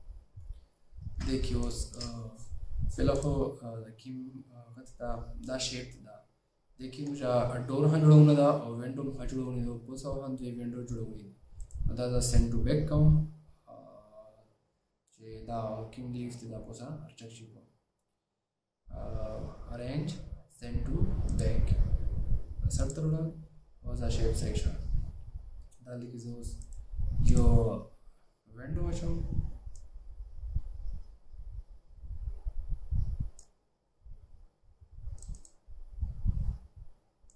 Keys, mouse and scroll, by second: 1.2 alt+scroll up 1, 2.0 space, 11.7 right click, 26.7 right click.